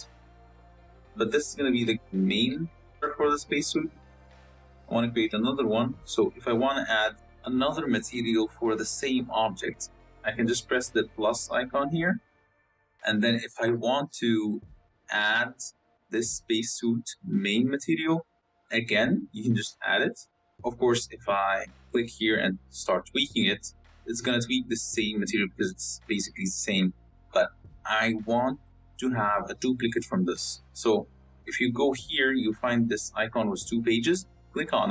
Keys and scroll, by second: 29.5 ctrl+z.